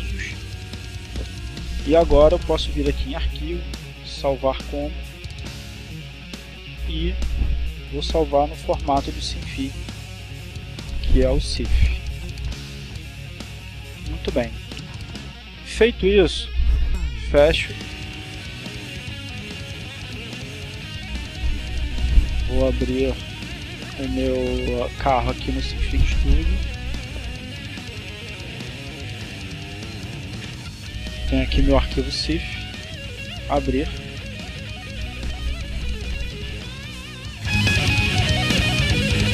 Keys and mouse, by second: 2.3 click, 3.5 click, 7.0 click, 10.7 click, 12.4 click, 16.4 click, 18.0 click, 18.9 click, 23.5 click, 25.9 click, 29.3 click, 32.7 click, 36.2-37.8 drag.